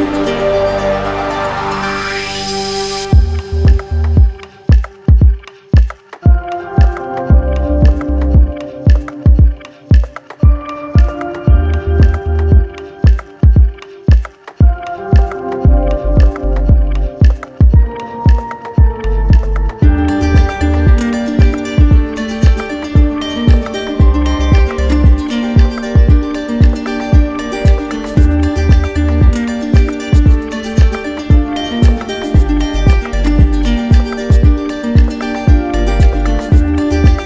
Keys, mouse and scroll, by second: 2.6 click, 3.6 click, 5.9 z, 8.4-9.7 typing, 11.4-12.5 drag, 12.9-14.1 drag, 15.2 click, 17.8 click, 18.2 ctrl+z, 21.9 click, 22.6 ctrl+d, 23.5 ctrl+d, 26.2 click, 26.3 ctrl+z, 31.4 click, 33.0 click, 35.5 right click.